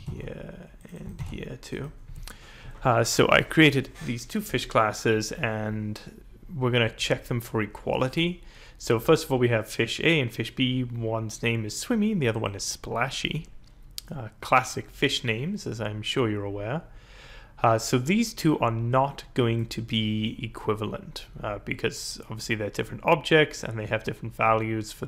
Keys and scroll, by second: 0.1 ctrl+v, 1.1 ctrl+v.